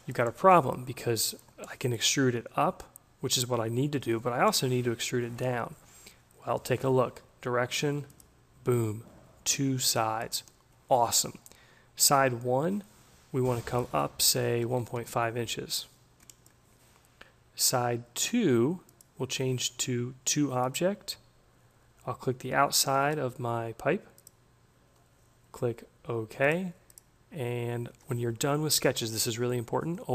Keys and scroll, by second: 14.2 1, 14.8 Delete, 15.0 5, 15.1 Tab.